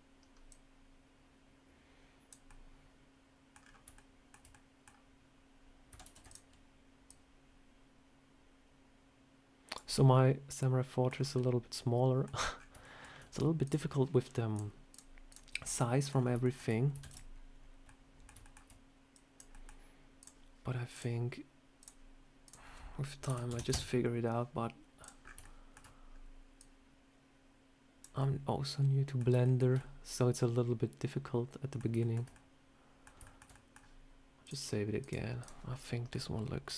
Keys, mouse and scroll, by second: 0.4 click, 2.4 middle click, 3.5 scroll down 3, 3.8 shift+middle click, 4.4 middle click, 5.9 shift+d, 7.0 click, 9.8 middle click, 11.0 scroll down 3, 11.2 middle click, 12.4 scroll up 4, 12.7 shift+middle click, 13.5 shift+click, 15.6 middle click, 16.0 scroll down 4, 16.3 shift+middle click, 16.9 shift+d, 17.7 middle click, 18.3 shift+middle click, 19.0 click, 19.4 middle click, 20.1 click, 20.8 click, 21.7 click, 22.3 click, 24.9 click, 25.1 scroll up 4, 25.3 shift+middle click, 26.0 scroll down 1, 26.5 click, 28.1 middle click, 29.3 middle click, 29.7 middle click, 31.9 shift+middle click, 32.2 middle click, 33.1 shift+middle click, 33.4 middle click, 34.3 click, 35.3 click, 36.0 middle click.